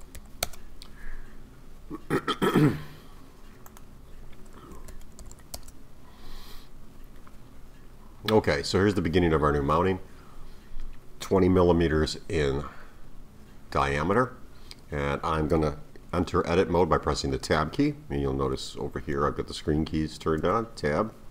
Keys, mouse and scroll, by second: 1.6-3.7 scroll down 4, 3.7-5.3 drag, 5.3 m, 6.9-7.8 scroll up 4, 7.8-8.4 scroll up 3, 8.4-8.9 scroll down 1, 8.9-12.0 middle drag, 20.4 Tab.